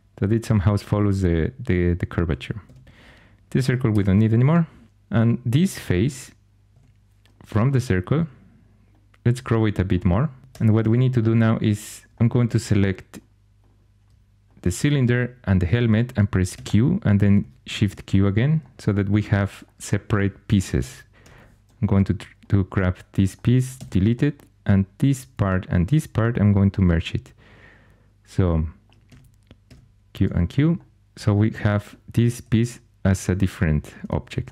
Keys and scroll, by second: 2.6 2, 3.8 x, 5.7 4, 6.7 3, 10.4 4, 16.5 q, 17.7 shift+q, 21.1 4, 23.7 x, 29.0 q, 29.6 q, 32.4 typing, 33.6 typing, 33.9 Escape.